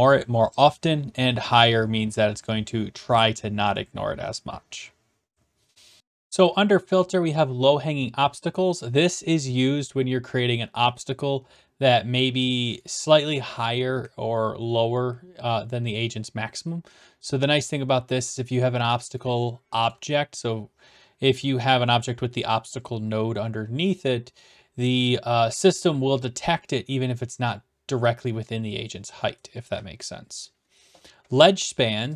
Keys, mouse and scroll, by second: 6.0 click, 12.9 d, 13.2 right click, 19.2-19.9 typing, 19.9 right click, 32.1 click.